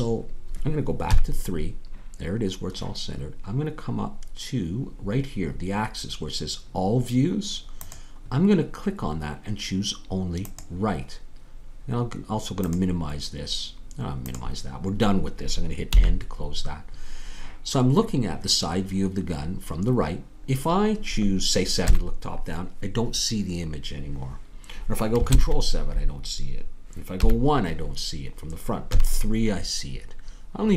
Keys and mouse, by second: 1.1 KP_3, 14.8-15.9 drag, 15.9 n, 20.2-21.8 middle drag, 21.8 KP_7, 25.3 ctrl+KP_7, 27.2 KP_1.